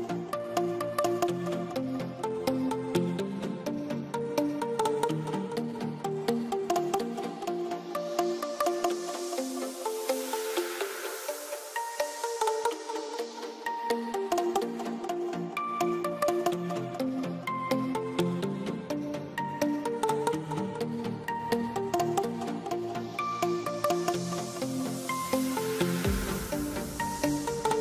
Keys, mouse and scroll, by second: 0.1 e, 0.5 click, 3.6 click, 4.1 right click, 4.7 click, 5.2-6.1 typing, 6.0 click, 9.2 click, 11.1 ctrl+right click, 11.5 click, 12.1 middle click, 13.0 click, 17.3 ctrl+right click, 18.8 g, 19.8 click, 20.7 c, 21.0 click, 22.5 click, 24.6 click, 27.5 ctrl+right click.